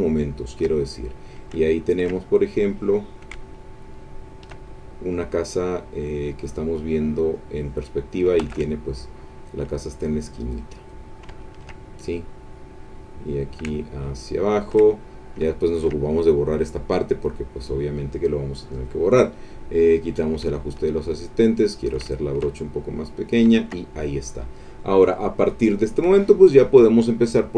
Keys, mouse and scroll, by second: 1.7 ctrl+middle click, 3.1-4.6 shift+drag, 5.2-7.5 drag, 8.4 ctrl+z, 9.0-11.1 ctrl+drag, 11.4 ctrl+middle click, 11.9 ctrl+middle click, 13.1-14.9 drag, 15.5 ctrl+middle click, 17.1 click, 18.7 click, 20.0 click, 20.5 shift+click, 21.4 shift+click, 22.1 shift+click, 22.6 shift+click, 23.6 ctrl+middle click, 25.4 click.